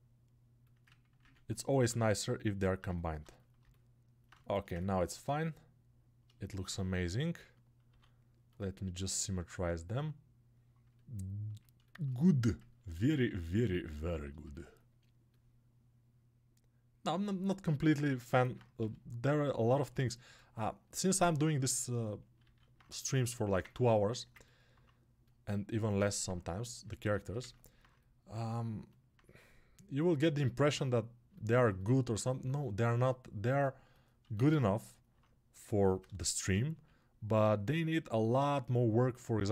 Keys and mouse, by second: 1.2 ctrl+r, 2.7 click, 3.1-6.2 right drag, 6.2-8.7 alt+shift+drag, 8.7-19.6 alt+middle drag, 19.6-24.5 alt+drag, 25.8-39.5 alt+drag.